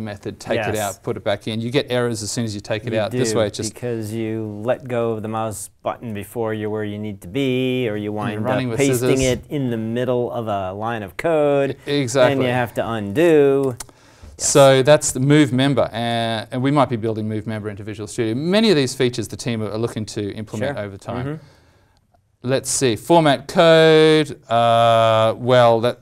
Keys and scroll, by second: 13.6 alt+Tab, 23.1 alt+Tab.